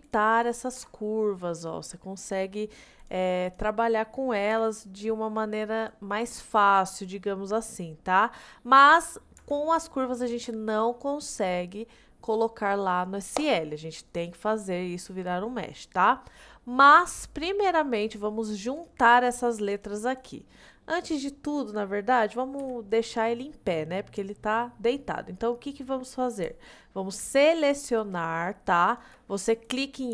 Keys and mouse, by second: 0.8 Tab, 1.6-3.1 drag, 3.4 click, 4.6 g, 9.4 Tab, 10.4 click, 18.0 click, 18.8 click, 19.3 click, 20.2 drag, 22.6 KP_1, 24.8-25.2 middle drag, 28.2 shift+click, 29.0 shift+click.